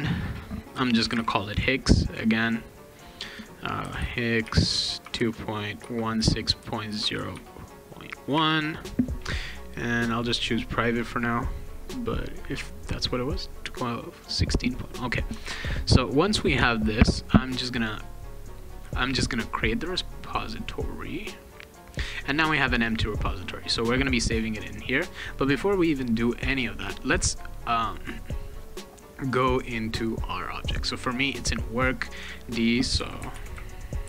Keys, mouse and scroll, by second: 0.0 click, 0.8-1.7 typing, 2.4 click, 2.9 click, 3.6-8.3 typing, 10.1 click, 11.0 click, 15.4 alt+Tab, 19.3 click, 23.8 click, 23.9 click, 24.9 click, 26.9 click, 27.8 click, 28.5 click, 29.0 middle click, 29.0-29.3 scroll down 2, 30.6 click, 30.8 click, 32.3 click, 32.7-34.0 typing.